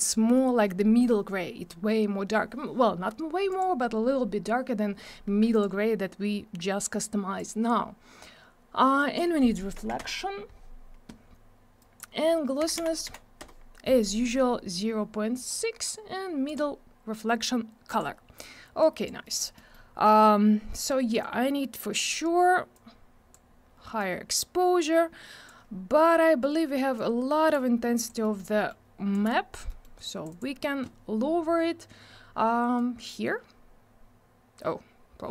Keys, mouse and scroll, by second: 3.5 click, 5.5 click, 7.0 click, 9.0 click, 9.7 1, 10.0 Return, 11.8 click, 12.6 0, 13.4 Return, 15.4 click, 16.4 click, 17.9 click, 18.8 click, 19.2 middle click, 19.5 middle click, 19.7 double middle click, 22.7 click, 24.0 click, 27.0 click, 27.9 click, 28.2 middle click, 28.3 double middle click, 28.6 middle click, 29.1 click, 29.7 middle click, 30.0 click, 30.2 double click, 30.3 click, 32.7 click.